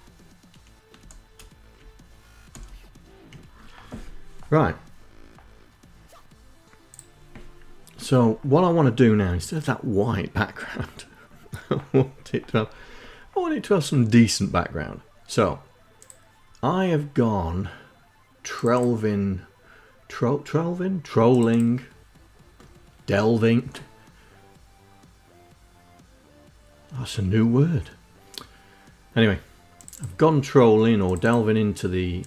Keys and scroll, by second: 0.9 space, 1.6 Right, 2.3 space.